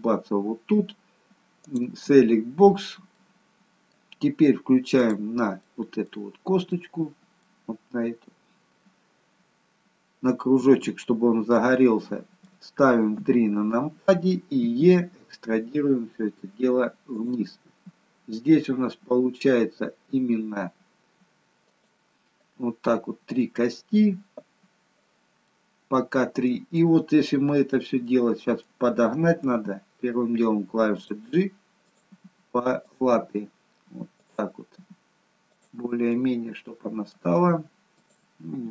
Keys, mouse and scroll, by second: 1.6 click, 2.7-3.1 scroll up 2, 3.1 middle click, 5.0 click, 5.7 middle click, 6.7 middle click, 11.5 middle click, 13.1 KP_3, 16.1 e, 25.4 middle click, 28.0 middle click, 29.5 g, 31.8 click, 32.0 g, 34.2 click, 34.7 g, 36.1 middle click, 37.9 click, 38.4 g.